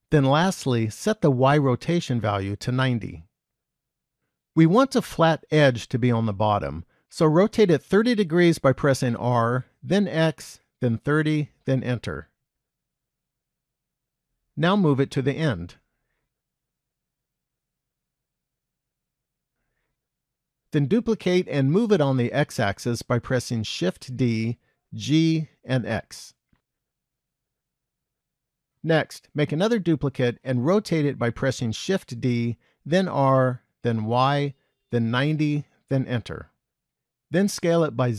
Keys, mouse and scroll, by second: 2.0 click, 6.2 click, 9.2 r, 13.4 KP_1, 14.7 g, 18.5-19.1 scroll up 1, 19.1-20.0 scroll up 1, 20.1 shift+middle click, 24.0 shift+d, 32.0 shift+d, 37.5 s.